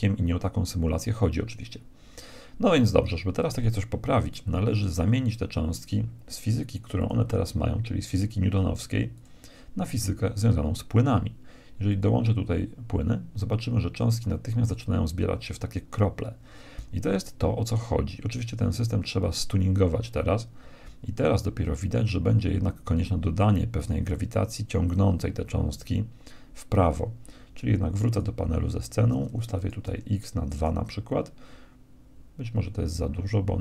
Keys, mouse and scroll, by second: 7.0-8.6 drag, 9.2-11.0 drag, 12.0-13.8 drag, 27.8-30.8 drag.